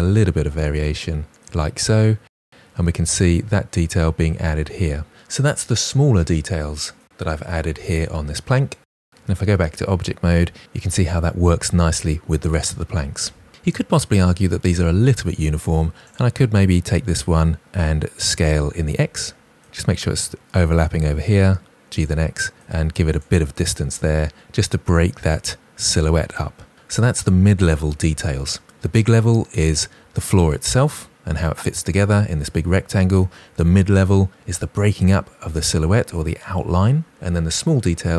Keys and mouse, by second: 0.3 click, 0.4 g, 0.6 click, 8.8 KP_Divide, 9.1 Tab, 10.2 click, 15.9 click, 18.1 s, 18.7 x, 20.0 click, 22.0 g, 22.3 x, 23.9 drag.